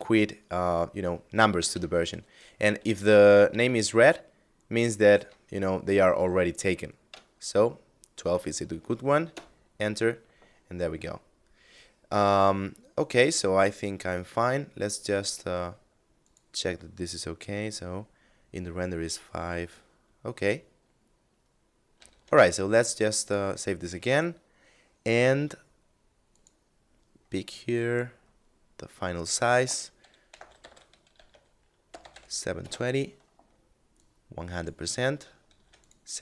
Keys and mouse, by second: 1.0 KP_Add, 1.5 KP_Subtract, 2.8 KP_Add, 8.6 Return, 13.6 right click, 15.6 click, 21.4 ctrl+s, 22.6 click, 25.8 click, 27.0 middle click, 28.6 click, 29.7 1, 29.8 2, 30.1 8, 30.1 0, 30.6 Tab, 31.3 7, 32.1 Return, 33.4 click, 35.0 ctrl+s, 35.1 click.